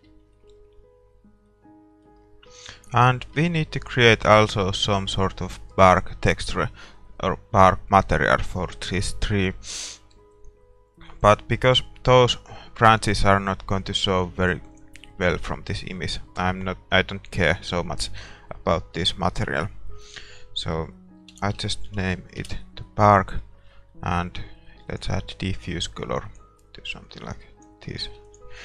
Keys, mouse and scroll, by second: 0.0 shift+z, 0.3-2.8 middle drag, 3.0 middle click, 3.9-5.9 drag, 3.9 right click, 4.4-8.7 right drag, 5.9 ctrl+s, 8.7-11.8 middle drag, 11.8-22.4 drag.